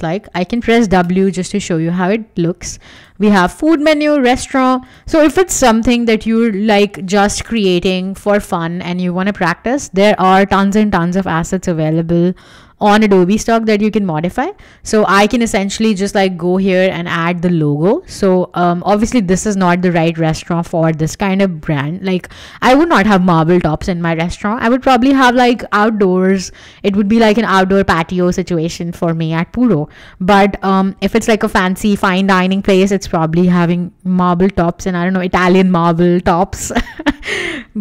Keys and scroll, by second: 1.0 w.